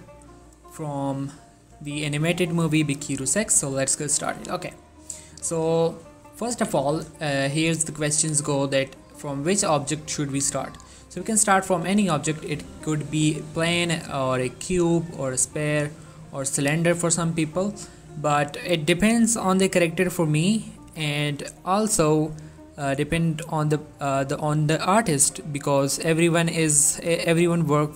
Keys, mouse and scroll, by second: 6.0 middle click, 6.7 1, 7.3 shift+middle click, 8.1 scroll up 1, 8.5 shift+middle click, 11.2 middle click, 12.3 shift+a.